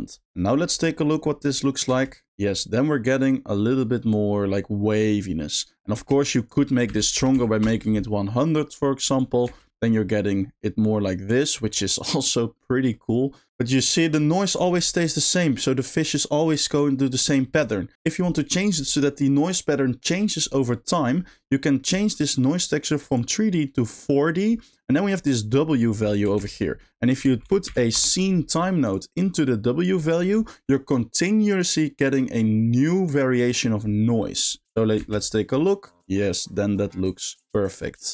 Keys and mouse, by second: 0.4 middle click, 1.4 click, 1.9 space, 5.5 middle click, 6.0 space, 6.5-7.7 drag, 7.3 0, 9.1 click, 9.5 space, 11.9 middle click, 12.6 middle click, 13.6 middle click, 14.6 middle click, 21.0 middle click, 21.7 middle click, 23.1-24.0 drag, 24.7 middle click, 26.4 shift+a, 27.4 s, 29.3-29.9 drag, 30.1 click, 34.6 click, 35.0 space, 37.7 middle click.